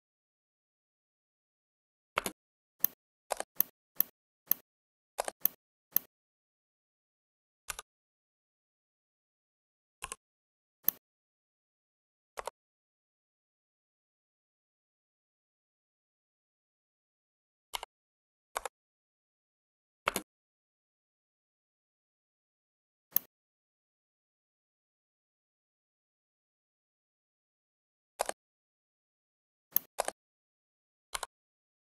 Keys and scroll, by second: 2.1 space, 7.6 Delete, 17.6 4, 18.4 Return, 20.1 space.